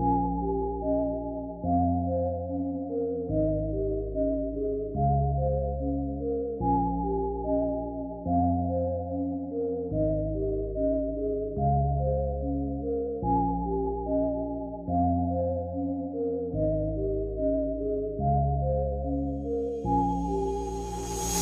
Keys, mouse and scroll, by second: 0.3-1.7 scroll up 4, 2.6 click, 4.9 click, 8.8 click, 9.4 click, 12.4 click, 13.2 click, 15.6 click, 16.0 click, 18.4 click, 19.6 click.